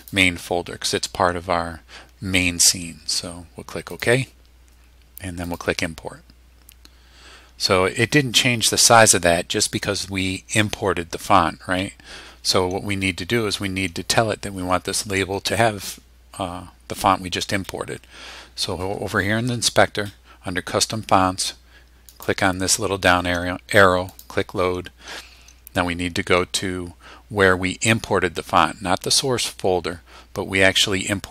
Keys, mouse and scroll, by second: 3.9 click, 5.5 click, 22.1 click, 24.1 click.